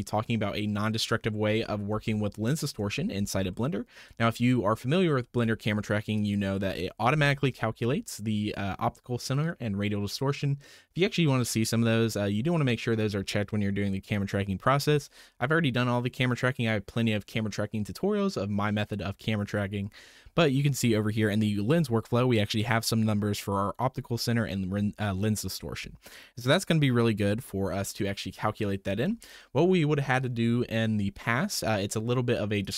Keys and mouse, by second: 2.0 shift+middle click, 3.5 shift+middle click, 6.5-12.0 drag, 32.6 click.